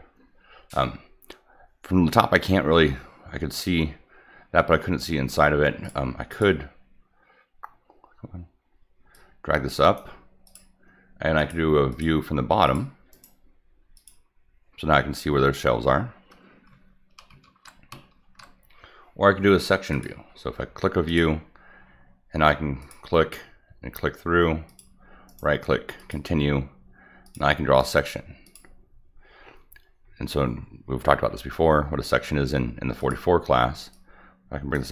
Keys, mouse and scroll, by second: 5.8 click, 6.3 click, 9.1-9.9 drag, 10.4 click, 11.3 click, 11.9 click, 12.6 click, 13.1 right click, 13.9 click, 17.5 ctrl+z, 18.1 ctrl+z, 19.9 click, 21.0 click, 22.8 click, 24.6 click, 25.2 right click, 25.9 click, 27.2 click, 27.8 right click, 28.4 click, 31.3 middle click, 32.9 click, 33.9-34.7 drag.